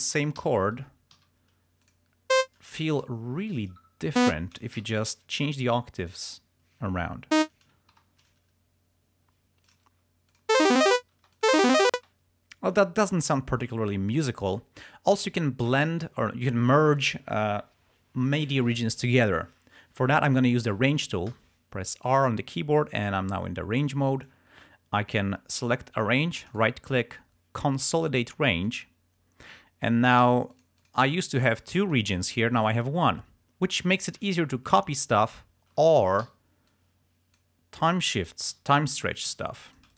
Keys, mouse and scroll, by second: 0.5 alt+shift+d, 1.3 e, 2.0 click, 2.5 click, 3.0 alt+shift+Down, 5.1 click, 5.4 alt+shift+Up, 6.6 click, 8.0 click, 8.4 alt+shift+Up, 9.8 click, 10.4 click, 10.7 space, 11.3 space, 11.4 click, 21.4 r, 22.9-24.5 drag, 26.6 right click, 28.7 click, 30.3 g, 30.7 click, 31.3-32.4 drag, 34.4 ctrl+scroll down 2, 35.3 ctrl+scroll up 2, 36.3 t, 36.8 click, 38.7 g, 39.4 s, 39.8 shift+click.